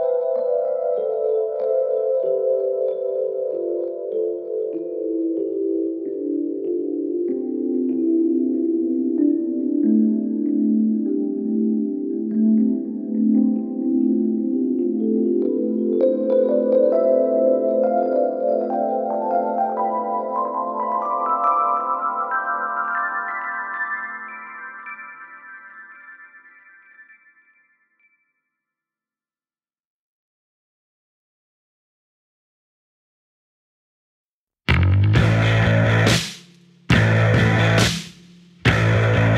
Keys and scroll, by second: 0.9 3, 6.6 ], 17.2 ], 22.1 4, 25.2 1, 28.7 4.